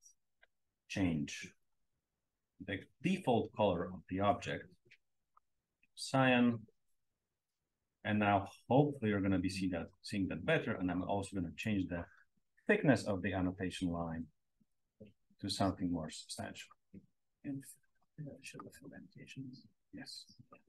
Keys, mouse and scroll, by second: 1.4 click, 3.7 click, 5.2 click, 8.5-9.8 scroll up 1, 9.8 click, 9.8-10.1 scroll up 1, 11.5 click, 12.5 click, 13.5 5, 14.8 click, 18.4 click, 18.9 click, 19.1 click, 19.3 click, 19.7-20.3 drag.